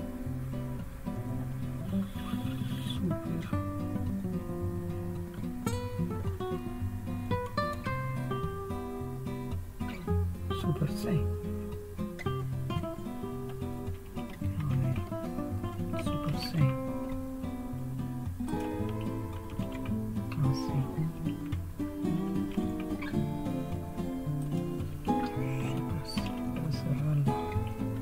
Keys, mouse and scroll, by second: 14.6 super+3, 16.3 super+c, 18.5 click, 19.5 super+c, 22.3 super+2, 24.4-26.0 drag, 26.2 super+c.